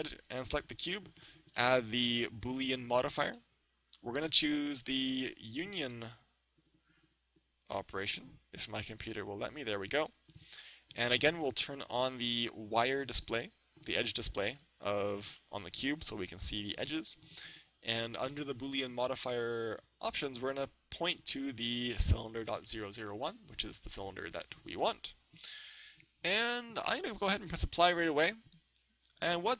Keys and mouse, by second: 1.5-3.3 drag, 8.9-10.7 drag, 12.0-15.1 drag, 14.1-15.9 middle drag, 16.1 a, 16.6 right click, 18.3-20.1 drag, 21.1-25.0 drag, 28.3-29.5 drag.